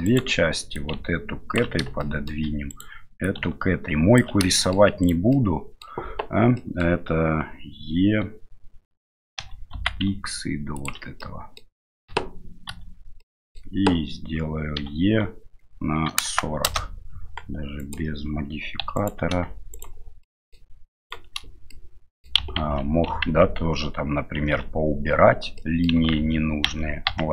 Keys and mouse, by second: 0.0 right click, 0.7 ctrl+click, 2.1 shift+right click, 2.7 right click, 3.2-4.2 ctrl+drag, 4.6 shift+middle click, 5.0 right click, 5.3 middle click, 6.5 middle click, 9.4 e, 11.2 middle click, 12.1 a, 12.7 a, 13.2 middle click, 14.8 e, 17.8 right click, 18.8 3, 18.9 right click, 19.7 shift+right click, 20.2 shift+middle click, 21.0 shift+right click, 21.7 middle click, 22.6 ctrl+z, 23.2 ctrl+z, 24.4 ctrl+z, 25.6 middle click, 26.1 ctrl+z, 26.7 ctrl+z, 27.1 ctrl+z.